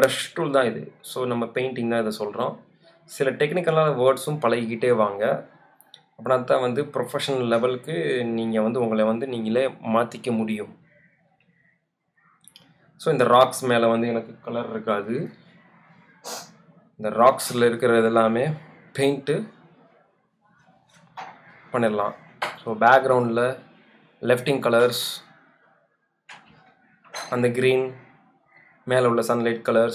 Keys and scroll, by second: 11.7 space, 16.2 space, 20.2 space, 25.0 space, 27.0 super+0.